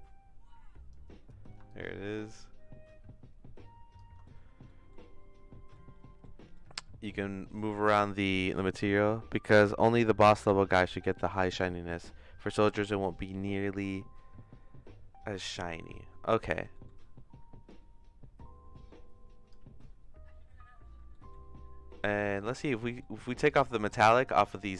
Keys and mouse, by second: 1.7-4.0 shift+drag, 4.7 middle click, 5.7 middle click, 6.4 middle click, 7.0-9.3 drag, 10.4 ctrl+z, 16.7 middle click, 17.7-19.5 drag, 21.1 middle click, 22.2 middle click, 22.8 middle click, 23.5 click, 24.2 middle click.